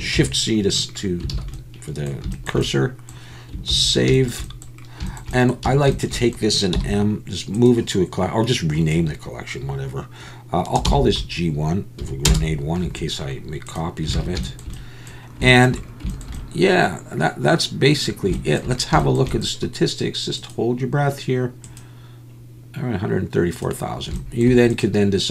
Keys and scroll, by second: 0.2 shift+c, 1.3 alt+a, 3.7 ctrl+s, 5.7 a, 6.7 m, 14.2 alt+a.